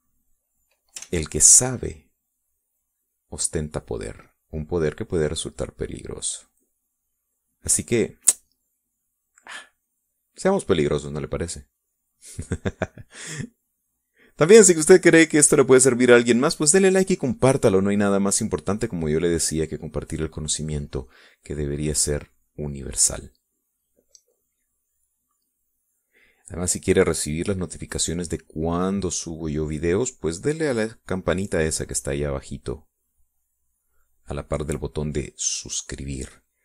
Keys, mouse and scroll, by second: 0.1 middle click, 1.5-2.5 drag, 2.6 ctrl+z, 3.0-8.3 ctrl+drag, 8.5 click, 10.2-11.4 drag, 11.5 click, 12.4-14.4 drag, 14.8-23.7 drag, 25.1-27.9 drag, 28.2-31.3 drag, 31.7-36.6 drag.